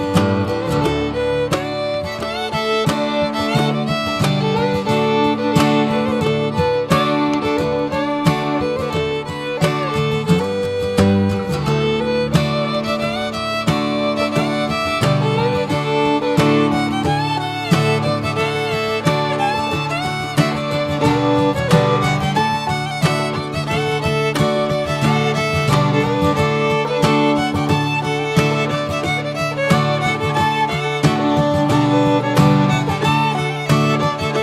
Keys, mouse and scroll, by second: 0.2 click, 3.8-10.0 drag, 10.0-12.7 middle drag, 14.5-19.4 middle drag, 19.4 click, 20.0 ctrl+t, 22.2 scroll up 4, 23.6-25.4 drag, 25.4 scroll up 1, 25.8-27.3 middle drag, 27.3 scroll down 2, 28.2 click, 28.4-31.4 middle drag, 31.4 click, 31.8 click, 32.2 Tab, 32.5 click, 33.1 Tab, 33.7 click.